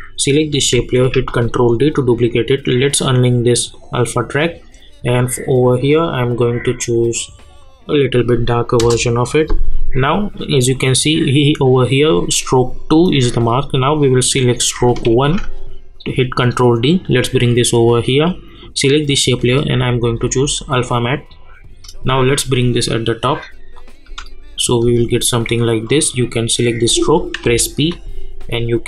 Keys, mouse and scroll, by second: 1.1 ctrl+d, 2.6-8.8 drag, 8.8 Return, 10.5 click, 14.0 click, 15.1 ctrl+d, 16.8-18.6 drag, 22.2-24.0 shift+drag, 24.0 space, 25.8 click, 27.4 p, 28.1-28.8 drag.